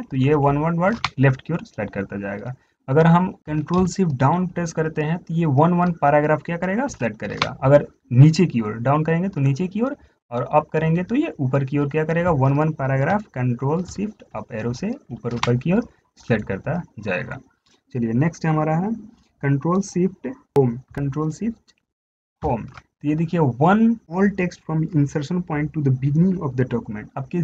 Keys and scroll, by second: 0.1 ctrl+shift+Left, 0.4 ctrl+shift+Left, 4.7 ctrl+shift+Down, 7.1 ctrl+shift+Down, 14.2 ctrl+shift+Down, 14.6 ctrl+shift+Up, 14.9 ctrl+shift+Up, 15.4 ctrl+shift+Up, 20.9 ctrl+shift+Up, 22.7 ctrl+shift+Home.